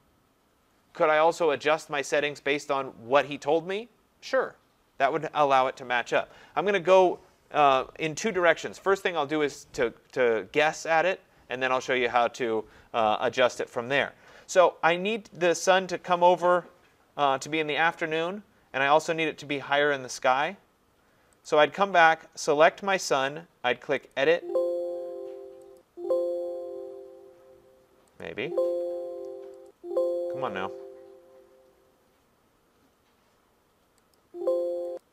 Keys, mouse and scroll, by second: 21.5 click, 24.1 click, 25.8 click, 28.2 click, 29.7 click, 34.1 click, 35.0 click.